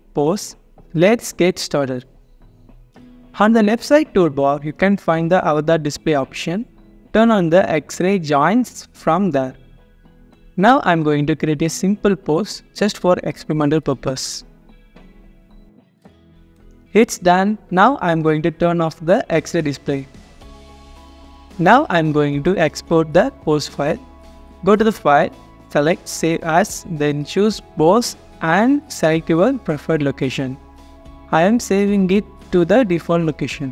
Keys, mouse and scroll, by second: 0.2-3.2 scroll down 1, 6.9 alt+click, 8.7 alt+middle click, 9.2 alt+click, 12.9 alt+click, 13.2 alt+middle click, 13.2 alt+click, 13.2 scroll up 1, 13.7 alt+click, 13.8-14.2 scroll up 1, 14.3-15.8 typing, 14.7 alt+click, 14.9 scroll down 1, 15.1 alt+click, 16.0 alt+click, 16.5 alt+click, 19.5 alt+click, 22.7 alt+click, 33.6 double click.